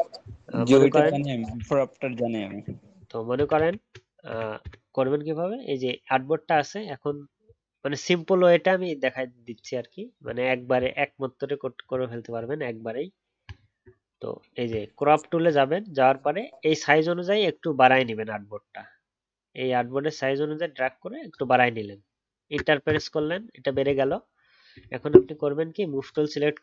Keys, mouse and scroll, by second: 1.7 ctrl+z, 1.8 ctrl+z, 2.0 ctrl+z, 2.1 ctrl+z, 3.5 ctrl+z, 13.5-15.7 alt+scroll down 1.